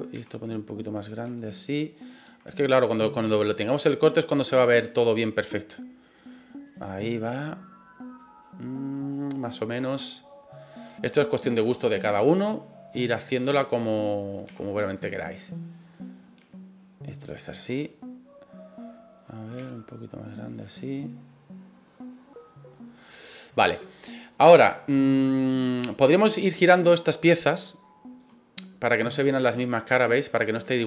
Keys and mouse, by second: 0.1 s, 0.8 click, 1.2 s, 2.0 right click, 2.2 s, 3.0 click, 3.4 right click, 3.7 s, 4.1 click, 4.4 middle click, 5.4 click, 6.2 middle click, 6.7 right click, 7.0 middle click, 8.2 middle click, 8.6 right click, 9.5 middle click, 10.3 click, 10.9 right click, 11.2-12.9 middle drag, 14.3 right click, 14.4 s, 15.7 click, 16.1 right click, 16.3 s, 17.1 click, 17.4 middle click, 17.7 right click, 19.1 right click, 19.5 s, 20.4 click, 20.9-22.2 drag, 22.7 right click, 23.2 middle click, 23.7 middle click, 24.3 middle click, 25.2 middle click, 26.1 right click, 28.1 click, 28.9 click, 29.9 right click, 30.4 click.